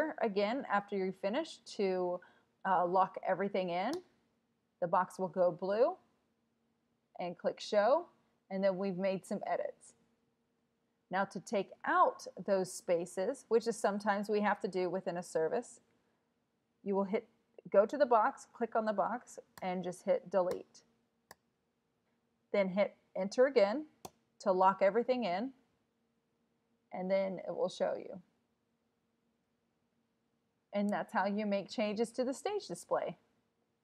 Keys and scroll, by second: 4.0 Return, 12.8 Down, 13.0 Down, 13.6 Down, 14.6 Down, 19.6 BackSpace, 20.5 BackSpace, 21.3 BackSpace, 24.1 Return.